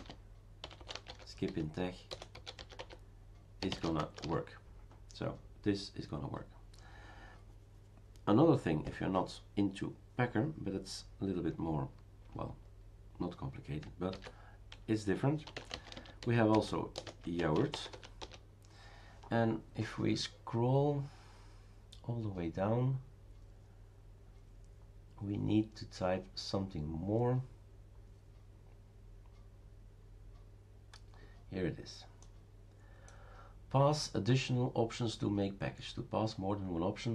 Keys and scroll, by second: 0.0-4.7 typing, 14.1 ctrl+c, 15.2-18.4 typing.